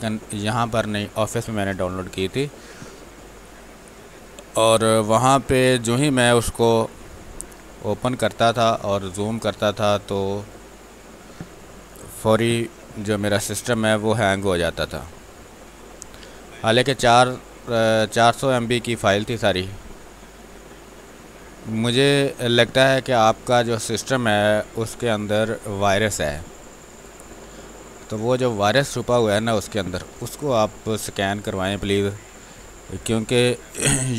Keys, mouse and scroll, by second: 3.3 space, 7.8 space, 8.0 click, 8.3 space, 9.4-16.2 drag, 15.3 click, 16.2 space, 16.7 space, 17.8-21.3 drag, 21.3 space, 21.5 click, 21.8 space, 24.0-27.3 drag, 27.3 space, 27.5 alt+click, 31.3 space, 32.2 r, 32.4 click, 33.4 b, 33.7 ctrl+space, 34.0 ctrl+click.